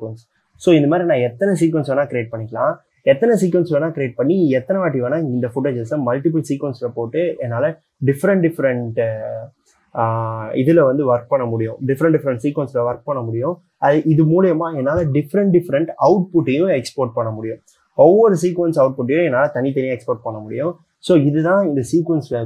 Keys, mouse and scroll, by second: 2.7 c.